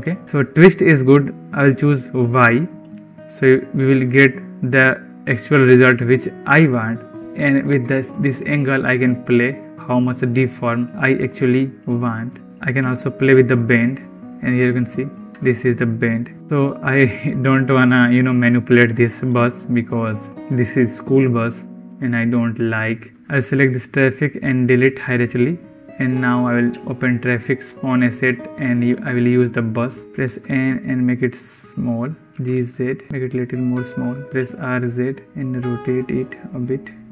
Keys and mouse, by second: 2.0 click, 8.0-12.2 drag, 13.8-16.4 drag, 23.1 click, 27.4-30.0 drag, 30.0 n, 30.2 s, 32.3 g, 33.1 s, 33.8 r.